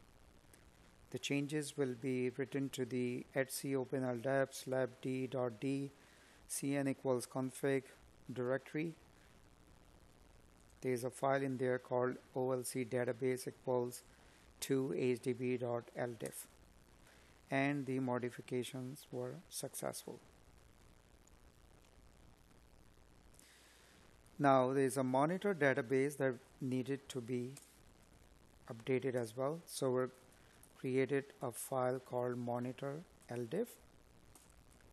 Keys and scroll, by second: 23.0 space, 29.7 space.